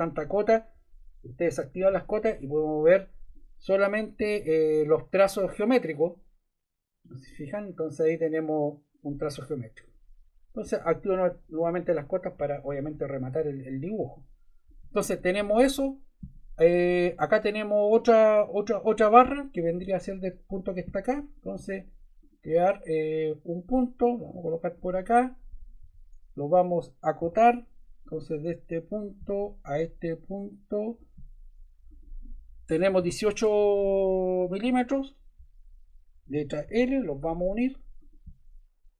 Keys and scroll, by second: 25.8 Escape, 27.2 d, 32.8 1, 34.7 Return, 36.6 l.